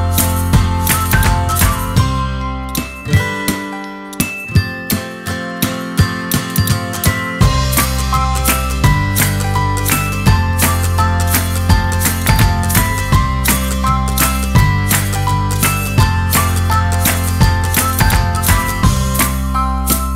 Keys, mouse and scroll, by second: 0.4 click, 1.0 shift+middle click, 1.3 click, 1.9 ctrl+Tab, 2.7-4.1 shift+drag, 4.1 middle click, 4.3 middle click, 4.9 ctrl+click, 5.3 middle click, 5.6 middle click, 5.6 click, 5.7 click, 5.9 middle click, 6.1 middle click, 6.7 shift+d, 7.3 r, 7.9 s, 8.6 space, 10.1 shift+Left, 10.6 space, 15.0 space, 18.2 click, 18.8-19.9 typing, 18.9 click, 19.9 click.